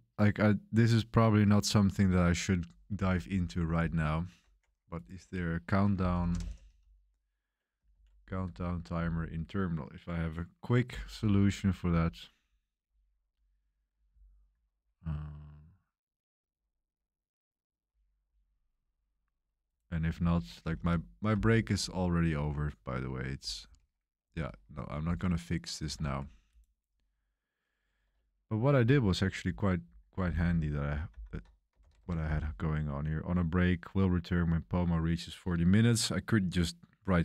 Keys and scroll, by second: 3.1 super+1, 5.7-7.2 typing, 7.8 Tab, 8.9 Return, 20.8 super+3, 21.7 super+1, 22.0 super+3, 22.0 super+1, 25.0 super+w, 25.9 super+3, 31.8 ctrl+b, 31.9 2.